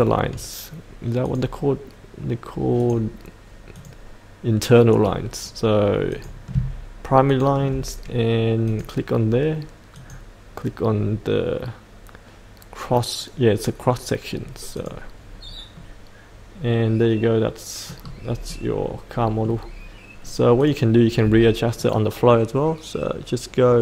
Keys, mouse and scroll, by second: 7.2 ctrl+click, 8.9 click, 15.7-18.1 middle drag, 18.1-18.5 scroll down 1, 18.5-19.6 middle drag, 20.6 click.